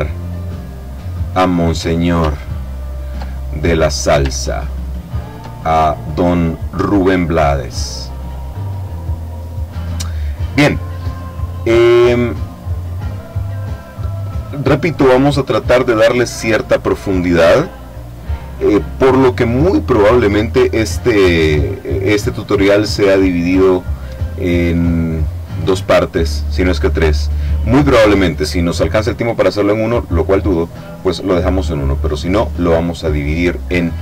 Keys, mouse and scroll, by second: 2.6-3.2 ctrl+scroll up 2, 3.5 ctrl+click, 4.5-5.1 ctrl+scroll up 2, 5.8-10.2 ctrl+drag.